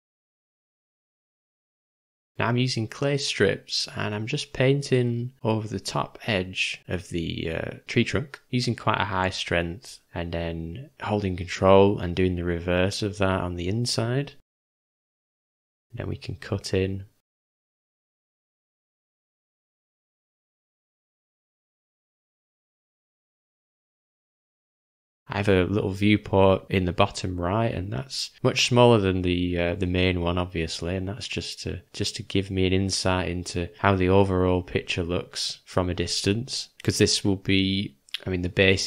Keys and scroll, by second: 3.8 v, 12.3 ], 12.4 ], 12.5 ], 17.3 ctrl+`, 19.5 `, 27.2-27.8 typing, 29.5 [, 29.6 [, 29.8 [, 29.9 [, 33.3 g, 33.8 ], 34.0 ], 34.2 ], 36.3 u, 36.8 ], 36.9 ].